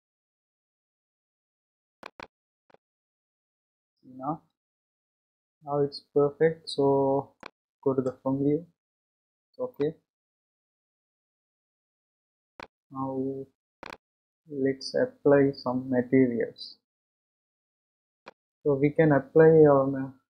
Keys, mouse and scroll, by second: 2.0-5.7 middle drag, 9.7-12.8 middle drag, 16.9 click, 18.2-20.3 middle drag.